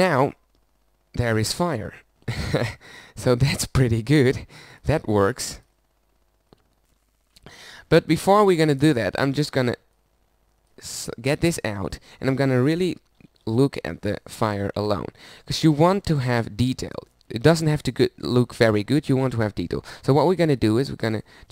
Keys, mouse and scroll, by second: 0.0 shift+space, 7.4-9.9 middle drag, 9.9-12.0 drag, 13.2 ctrl+b, 17.4-20.6 middle drag.